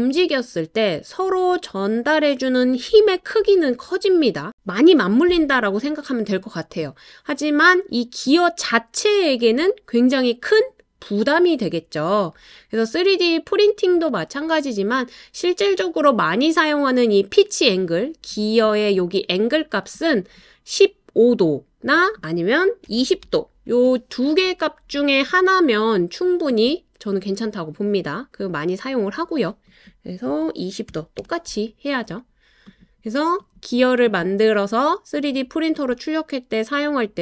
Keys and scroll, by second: 22.9-23.7 typing, 30.3-31.2 typing.